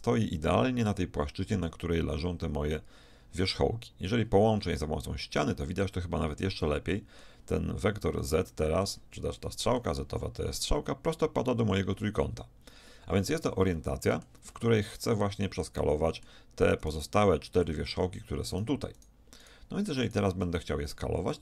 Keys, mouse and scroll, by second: 4.6 f, 5.5 middle click, 5.8 middle click, 7.9 z, 11.1-16.8 middle drag, 16.9-18.8 right drag, 18.8 middle click, 20.0 middle click, 20.1-21.4 middle drag.